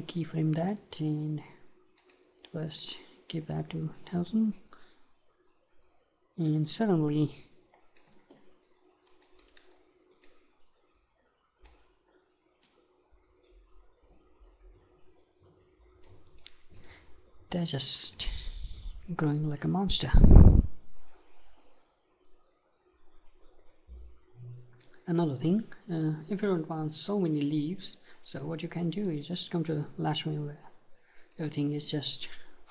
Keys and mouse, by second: 2.0-4.0 right drag, 4.4-6.2 right drag, 9.1-12.6 right drag, 12.6-14.8 drag, 16.4-23.8 right drag, 29.2-31.0 right drag.